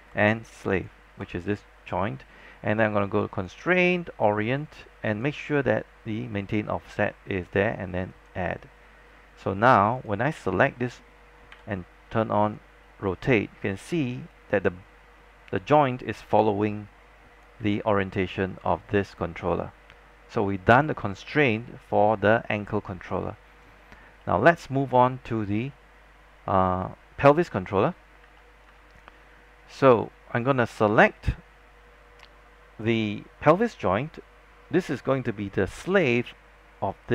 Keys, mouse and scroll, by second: 0.8 shift+click, 3.4 click, 11.6 e, 12.6-17.7 drag, 17.7 z, 19.8-20.3 scroll down 1, 20.3-20.9 scroll up 1, 24.3 alt+middle click, 27.1 scroll up 1, 27.5 scroll down 1, 28.5 alt+middle click, 29.6 scroll up 1, 32.9 click.